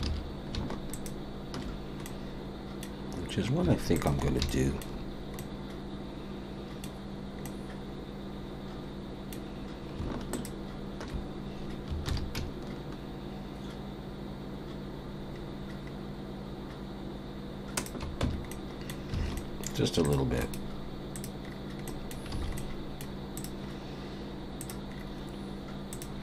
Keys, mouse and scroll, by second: 0.0 ctrl+z, 0.9 alt+shift+click, 2.0 middle click, 3.9 alt+shift+click, 4.5 shift+middle click, 5.4 middle click, 7.4 middle click, 7.7 shift+middle click, 10.3 alt+shift+click, 12.1 ctrl+b, 18.2 Tab, 18.5 middle click, 19.2 alt+a, 19.3 middle click, 20.0 click, 20.4 right click, 21.4-22.2 scroll down 3, 21.8 middle click, 22.3 alt+a, 22.5 middle click, 23.3 click, 24.6 click, 24.9-25.4 scroll down 4, 25.9 click.